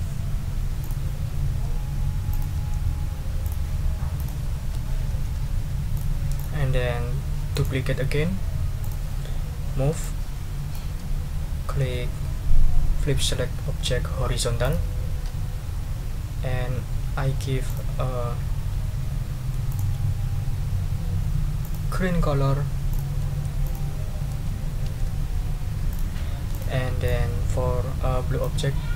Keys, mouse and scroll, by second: 0.8 click, 2.3 click, 3.4 click, 4.2 ctrl+click, 4.5 ctrl+a, 5.1 ctrl+v, 5.9 click, 6.4 click, 7.5 right click, 7.6 click, 8.8 click, 10.0 ctrl+click, 14.6 click, 17.7 click, 19.7 right click, 21.6 click, 22.9 click, 23.6 click, 24.3 ctrl+a, 24.8 ctrl+v, 25.9 click, 26.5 click, 27.0-28.6 drag.